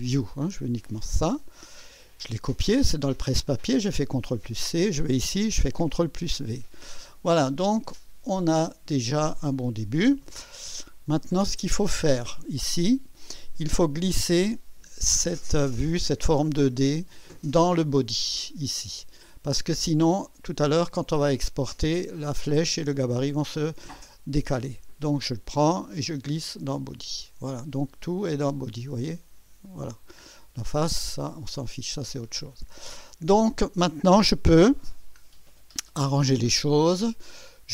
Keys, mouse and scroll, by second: 0.9 click, 4.5 click, 5.8 ctrl+v, 7.7-9.8 drag, 15.5 click, 25.1-26.9 drag, 28.6 click, 29.5 click, 34.6 KP_2, 35.3 scroll up 2, 37.4 scroll down 2.